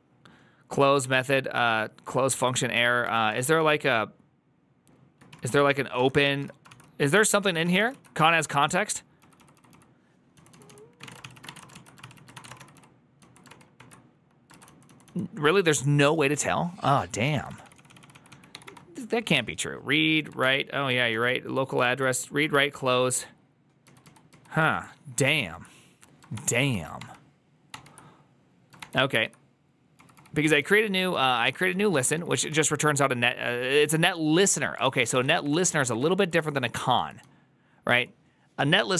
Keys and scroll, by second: 0.9 ctrl+n, 2.9-13.1 typing, 13.3 ctrl+d, 13.6 ctrl+d, 14.3-15.0 typing, 17.2-18.5 typing, 20.3 ctrl+d, 20.7-21.5 typing, 23.1 ctrl+d, 24.5 ctrl+u, 25.2 ctrl+o, 26.2-27.0 typing, 27.6 ctrl+d, 29.0 ctrl+d, 29.6-32.9 typing, 34.7 ctrl+c, 34.7-37.8 typing.